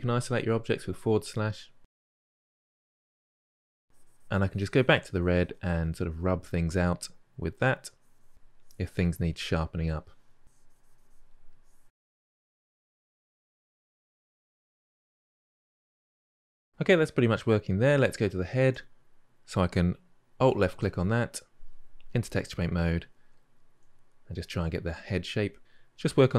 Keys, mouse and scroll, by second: 0.5-1.4 middle drag, 1.4-2.3 drag, 2.3-2.6 middle drag, 2.6-3.0 drag, 3.0-3.6 middle drag, 3.8-6.3 drag, 6.3 middle click, 6.4 click, 6.9 click, 7.1 middle click, 7.2 middle click, 7.3 click, 7.5 middle click, 7.5 click, 7.7 middle click, 7.8 click, 8.0 shift+middle click, 8.3-8.6 drag, 8.6 middle click, 8.9-9.3 drag, 9.5 shift+middle click, 9.8 click, 10.0 middle drag, 10.1 click, 10.5 drag, 10.7 middle click, 10.7 click, 11.0 middle click, 11.1 click, 11.2 shift+middle click, 11.4 click, 11.8 middle click, 12.1 middle click, 12.2 click, 12.4-12.7 ctrl+middle drag, 12.7 click, 12.9 click, 13.1 middle click, 13.3 f, 13.4 drag, 13.6 middle click, 13.6 click, 14.0-14.4 ctrl+middle drag, 14.5 shift+middle drag, 14.6-15.4 drag, 15.4-15.9 ctrl+middle drag, 15.9 KP_Divide, 16.0-16.7 ctrl+middle drag, 20.3 alt+click, 22.7-23.2 drag, 23.2-24.3 shift+middle drag, 24.3-24.8 drag, 24.8 shift+middle drag, 24.9 drag, 25.1 middle click, 25.3 click, 26.1 middle click.